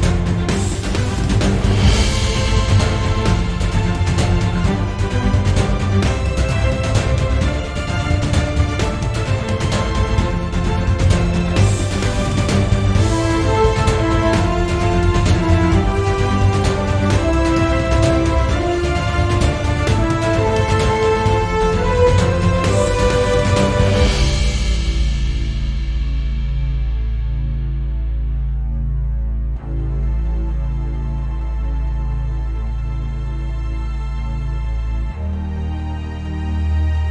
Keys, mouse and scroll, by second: 0.2 scroll up 1, 0.4-0.8 shift+middle drag, 0.8 click, 1.0 g, 1.8 click, 2.3 click, 4.1 scroll down 1, 4.3-5.6 shift+middle drag, 5.3 scroll up 2, 5.6 click, 5.8-9.1 typing, 6.7 click, 8.1 click, 8.8 click, 10.2 click, 10.5 click, 10.7 g, 11.8 click, 12.0 scroll down 1, 12.3-13.0 shift+middle drag, 13.0 scroll up 1, 13.2 click, 13.3 x, 13.9 click, 14.0 g, 14.8 click, 15.3 click, 15.7 x, 16.1 click, 16.2 g, 16.9 click, 17.0 g, 17.9 click, 18.1-18.7 shift+middle drag, 18.7 click, 18.8-23.1 typing, 19.4 click, 20.3 click, 21.1 click, 22.2 click, 23.0 click, 25.0 scroll down 1, 25.3-26.9 shift+middle drag, 25.7-26.2 scroll up 1, 26.9 click, 27.0 g, 27.9 click, 28.0 g, 28.9 click, 29.2 x, 29.7-30.0 shift+middle drag, 30.0 drag, 30.5 Escape, 30.7 click, 30.9 g, 32.1 click, 32.1 g, 33.2 click, 33.6 click, 33.8 g, 34.5 click, 34.6 g, 35.1 click, 35.4 g, 35.9 click, 36.2 g, 36.5 click, 36.7 shift+middle click.